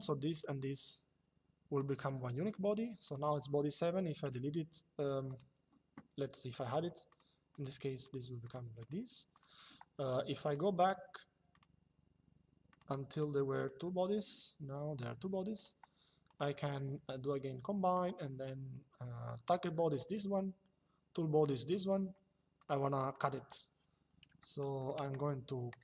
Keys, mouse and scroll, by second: 1.5 click, 2.7 click, 4.0 Delete, 6.3 click, 10.1 click, 11.2 click, 12.4 click, 15.3 click, 17.7 click, 19.7 click, 21.1 click, 22.3 click, 24.1 shift+middle click.